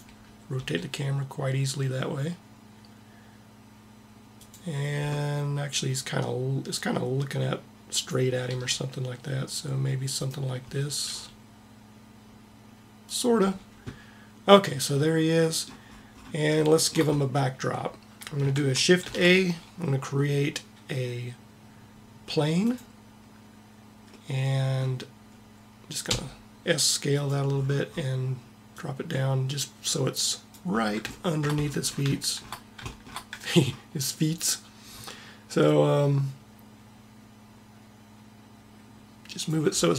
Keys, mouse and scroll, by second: 0.5 g, 5.9-7.8 drag, 8.4 r, 11.0 r, 19.1 shift+a, 26.0 s, 28.7 middle click, 29.6 click, 31.2-33.0 middle drag, 35.7-37.2 drag.